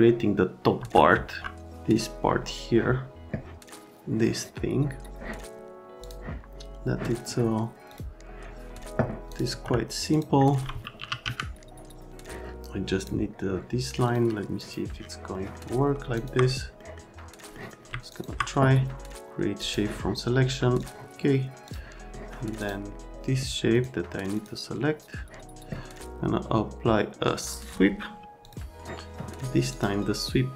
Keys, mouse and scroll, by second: 0.8 F3, 1.3 F3, 6.0 click, 7.9 click, 9.3 click, 9.5 F3, 10.1 click, 10.7-11.7 typing, 13.0 click, 14.1 click, 14.6 click, 15.3 middle click, 16.2 ctrl+click, 16.8 middle click, 17.5 middle click, 18.1 ctrl+click, 19.6 click, 20.8 click, 21.7 click, 22.1 middle click, 22.6 click, 23.7 click, 24.4 click, 27.4 click, 28.4 click, 29.7 click.